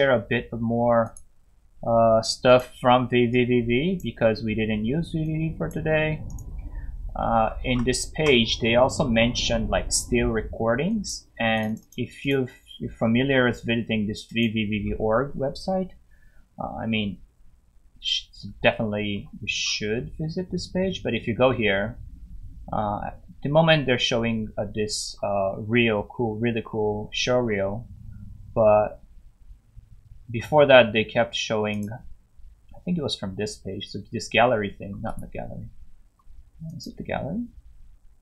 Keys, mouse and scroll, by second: 1.1 click, 7.2 scroll up 1, 8.5 scroll down 1, 10.9 click, 11.7 double click, 11.8 click, 12.2 click, 13.0 scroll up 1, 14.3 click, 18.0 scroll down 1, 18.7 scroll down 1, 19.6 scroll up 1, 21.5 scroll down 1, 22.8 scroll up 1, 25.0 scroll down 1, 25.8 scroll down 1, 26.5 scroll up 1, 27.4 scroll down 1, 30.2 scroll down 1, 31.7 click, 34.0 scroll down 1, 35.1 right click, 36.0 scroll down 1, 36.7 click.